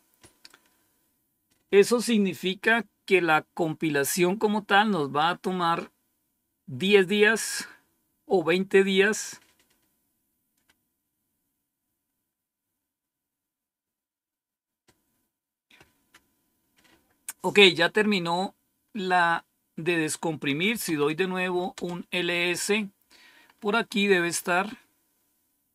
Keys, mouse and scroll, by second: 20.4-21.3 typing, 21.7 Return, 22.8 typing, 23.4-24.8 scroll up 1, 24.8-25.3 scroll down 1.